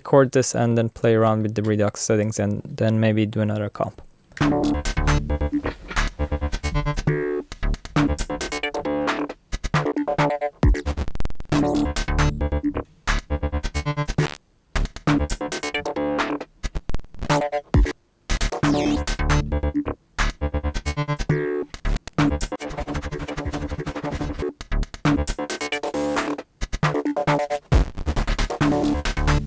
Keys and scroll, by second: 4.4 r.